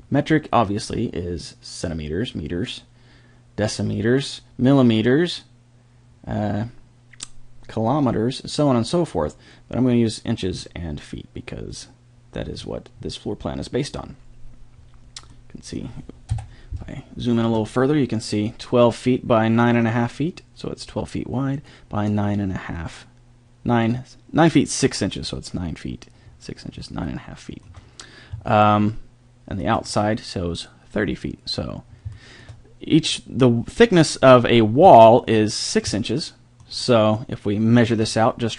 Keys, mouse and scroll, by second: 12.6 middle click, 16.3 KP_7, 27.0-28.1 middle drag, 28.6 middle click, 29.0 middle drag, 29.2 middle click, 29.4 middle click.